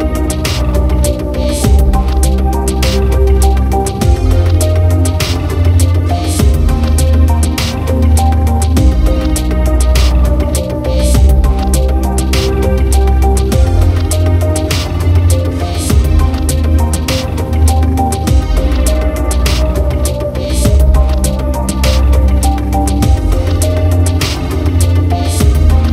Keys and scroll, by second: 9.3 ctrl+z, 9.8 ctrl+0.